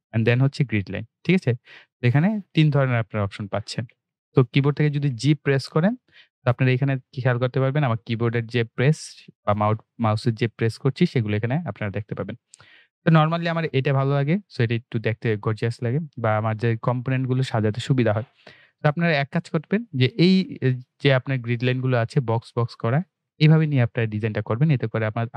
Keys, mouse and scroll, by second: 2.5-3.8 typing, 5.0-5.8 typing, 6.9-8.0 typing, 9.0 g, 11.4-11.9 typing, 14.0-14.5 scroll up 1, 14.5 scroll down 1, 15.7 scroll up 1, 16.3-18.0 scroll down 1, 18.7-20.5 scroll up 1.